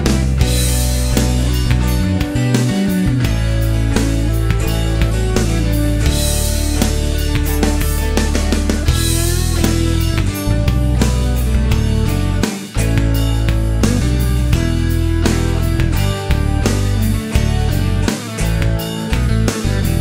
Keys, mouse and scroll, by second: 0.2 scroll down 1, 0.3 middle click, 1.7 click, 4.3 click, 5.4 click, 6.3 right click, 8.3 click, 9.4 click, 12.0 shift+o, 13.5 click, 14.4 shift+r, 16.0 2, 16.1 Return, 18.1-20.0 drag.